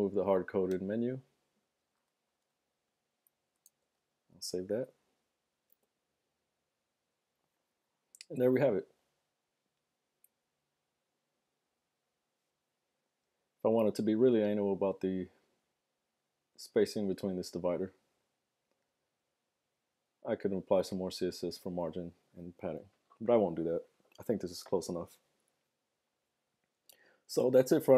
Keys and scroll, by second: 2.0 BackSpace, 2.4 BackSpace, 2.8 Down, 4.4 super+s, 4.5 super+Tab, 5.8 super+r.